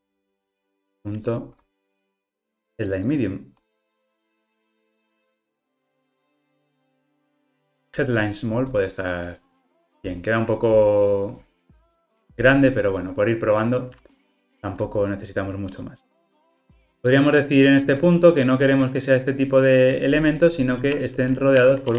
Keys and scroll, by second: 7.3 Return.